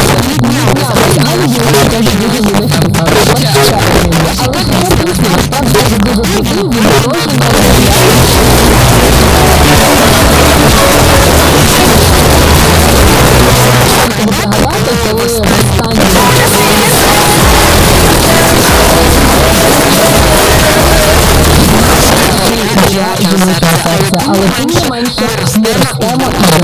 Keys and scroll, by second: 13.7 Page_Down, 22.1 Page_Down.